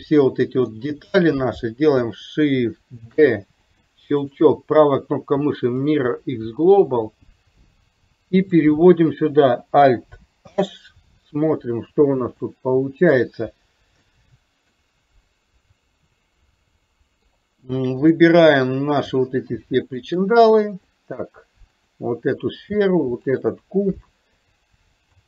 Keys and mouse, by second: 3.1 shift+d, 6.9-8.7 drag, 10.5 alt+h, 12.5-13.2 middle drag, 14.1-14.9 middle drag, 15.4-16.2 drag, 16.7-17.4 middle drag, 18.2-18.7 middle drag, 20.0 shift+click, 21.0 middle drag, 23.4 shift+click.